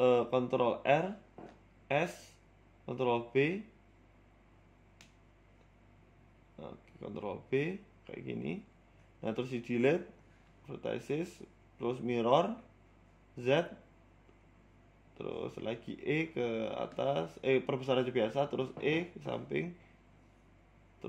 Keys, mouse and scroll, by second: 0.1 Tab, 1.2 ctrl+t, 1.7 ctrl+z, 2.2 ctrl+r, 2.9 s, 4.1 ctrl+b, 6.2 ctrl+z, 6.8 ctrl+t, 7.1 ctrl+r, 8.1 ctrl+b, 10.4 scroll down 1, 10.7 click, 11.6 Delete, 12.6 click, 14.4 click, 15.1 click, 16.0 e, 16.5 s, 17.3 e, 18.2 g.